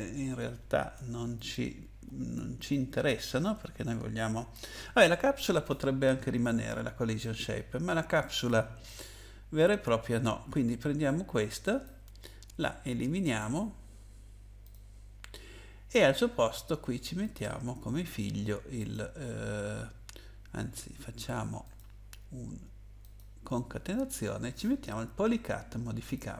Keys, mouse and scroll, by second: 1.3 click, 2.6 click, 7.2 click, 11.6 right click, 13.2 click, 14.6 click, 17.2 click, 18.9 click, 21.6 click, 23.0 click, 26.0 click.